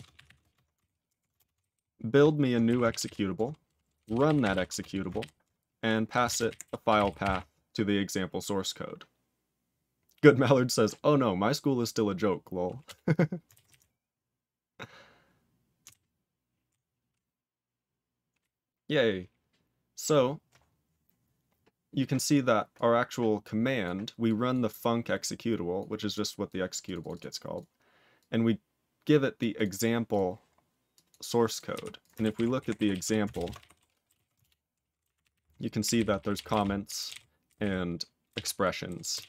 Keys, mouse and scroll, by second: 0.0-0.4 typing, 0.8 alt+b, 1.0 alt+f, 1.3 ctrl+space, 1.5 ctrl+alt+b, 1.7 ctrl+alt+b, 2.6 alt+w, 2.8 ctrl+e, 3.0 ctrl+y, 3.7-5.0 typing, 5.1 ctrl+y, 6.2-7.8 typing, 31.7 q, 31.9 click, 34.4 ctrl+Return, 35.0 ctrl+=, 35.8 ctrl+n, 35.9 ctrl+n, 36.1 ctrl+p, 36.3 ctrl+p, 36.4 ctrl+space, 36.5 ctrl+n, 36.8 ctrl+g, 36.9 ctrl+n, 37.0 ctrl+a, 37.1 ctrl+n, 37.4 ctrl+n, 37.6 ctrl+n, 38.2 ctrl+space, 38.3 ctrl+e, 38.8 ctrl+g, 39.1 ctrl+space, 39.1 ctrl+a.